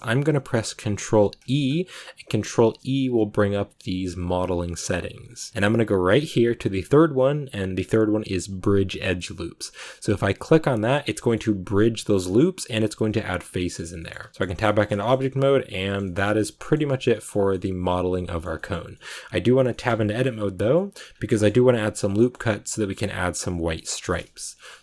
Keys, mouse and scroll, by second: 10.8 scroll down 1, 11.1 middle click, 11.9 scroll up 1, 13.2-14.2 scroll down 6, 13.5 middle click, 13.9 middle click, 14.1 Tab, 14.3 middle click, 14.4 scroll up 1, 14.5 scroll down 1, 14.6-17.2 middle drag, 17.2 scroll up 1, 17.4 middle click, 18.3 scroll up 1, 18.4-19.7 shift+middle drag, 19.7 Tab, 22.0 scroll up 1, 22.1-23.5 middle drag, 23.5 scroll down 1, 23.6 shift+middle click, 24.2 scroll up 1, 24.4 middle click.